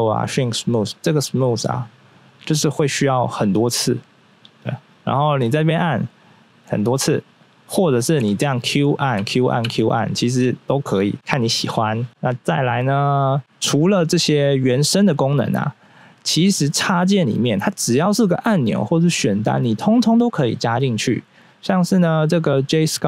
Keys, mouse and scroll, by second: 2.1 click, 3.1 click, 6.1 click, 7.0 click, 8.2 q, 8.9 click, 9.4 click, 9.7 click, 9.7 typing, 11.7 q, 21.7 click.